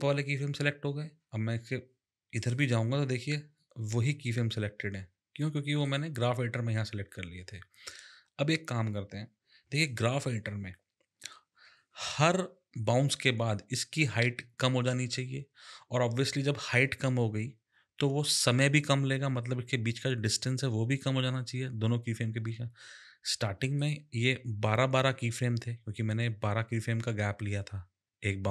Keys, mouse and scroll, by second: 2.3 click, 5.9 click, 23.7 click.